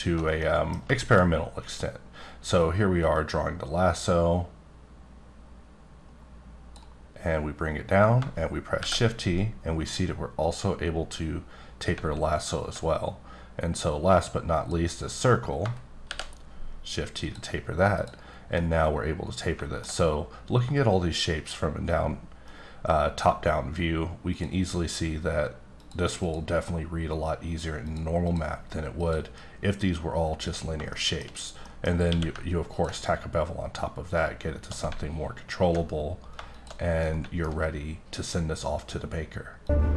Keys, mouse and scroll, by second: 0.2 scroll up 1, 0.7 middle click, 1.1-1.5 shift+scroll down 2, 2.6-7.0 drag, 8.8 shift+t, 9.8 click, 10.4 click, 12.3-12.8 alt+scroll up 1, 12.8-13.7 scroll up 1, 13.8 click, 16.0 shift+t, 17.2 click, 17.9 click, 18.5-20.1 middle drag, 24.2 click, 25.7 click, 26.2 click, 27.9 click, 28.2 click, 28.9 click, 30.9 shift+middle click, 31.3-31.6 shift+scroll up 1, 31.6 middle click, 31.9 scroll up 2, 32.0 q, 32.7 ctrl+click, 35.1-35.8 alt+scroll down 2, 35.8-37.0 scroll down 7, 36.5 shift+click, 37.0 middle click, 37.5 scroll up 1.